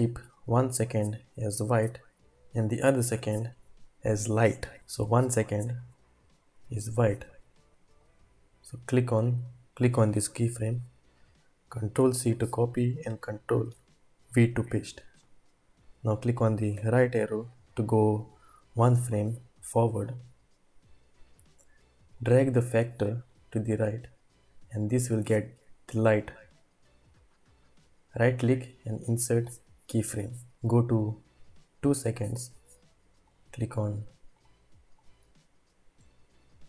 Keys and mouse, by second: 5.7 drag, 12.0 ctrl+c, 13.7 ctrl+v, 16.8 Right, 22.4-25.0 drag, 28.1 right click, 30.5-31.7 drag, 33.2 click, 34.4 click.